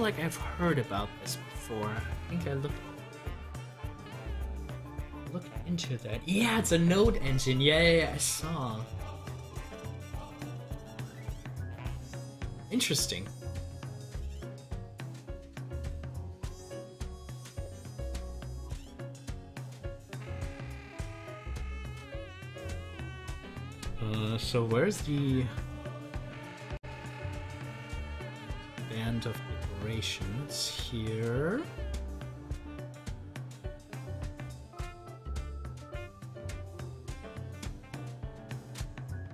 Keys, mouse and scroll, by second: 13.8 scroll up 1, 15.8 scroll down 1, 19.2-22.9 drag, 22.9 ctrl+z, 28.5 ctrl+z, 30.7 ctrl+z, 32.5 ctrl+z, 33.8-36.0 drag, 36.0 ctrl+z, 38.6 ctrl+z.